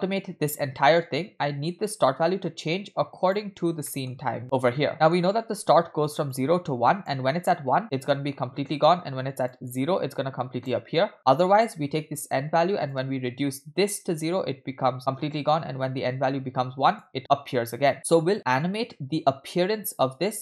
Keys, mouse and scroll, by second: 3.6 scroll down 2, 3.9 middle click, 4.4 click, 4.9 middle click, 5.2-6.1 scroll up 3, 6.1 scroll up 1, 6.3-7.1 drag, 9.5-10.7 drag, 12.9-17.0 drag.